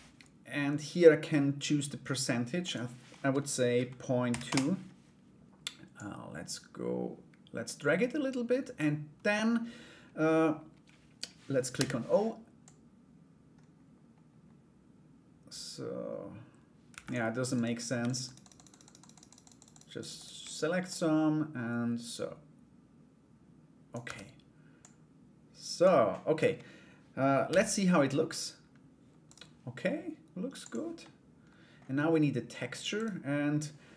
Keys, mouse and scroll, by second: 2.2-4.4 drag, 5.5-8.3 drag, 12.2-16.7 drag, 17.1 right click, 17.6 shift+right click, 17.8 shift+right click, 18.0 shift+right click, 18.1 shift+right click, 18.3 shift+right click, 18.4 shift+right click, 18.5 shift+right click, 18.7 shift+right click, 18.8 shift+right click, 19.0 shift+right click, 19.1 shift+right click, 19.3 shift+right click, 19.5 shift+right click, 19.7 shift+right click, 20.4-23.5 drag, 23.6 Tab, 24.3-25.4 drag, 26.0 Escape, 27.0 /, 28.8 right click, 30.6 middle click, 32.5 right click.